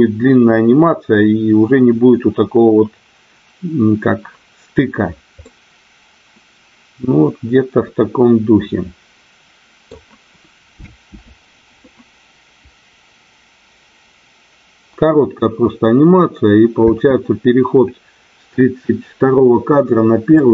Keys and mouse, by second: 5.5-9.9 middle drag, 10.7 space, 17.0 space, 20.4-20.5 middle drag.